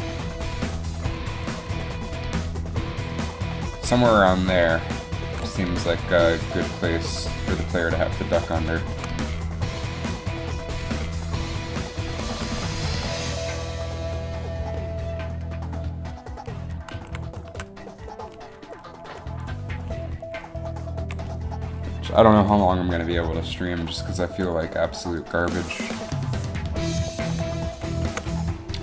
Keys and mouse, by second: 1.8 r, 5.4 r, 8.7-9.9 middle drag, 12.6 alt+r, 17.0 z, 17.5 z, 25.4 click, 26.1 KP_7, 27.6 KP_3.